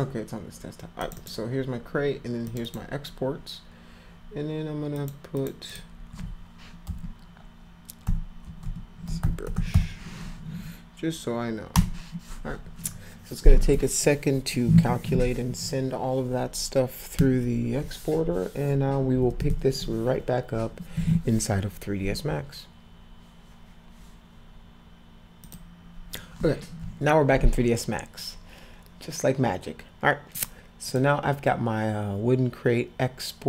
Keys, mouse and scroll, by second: 1.0 click, 1.2 click, 2.4 click, 2.6 click, 4.9 click, 5.4 click, 5.7 click, 6.2 Caps_Lock, 6.9 -, 8.0-9.9 typing, 25.4 click, 30.3 click, 30.8 click.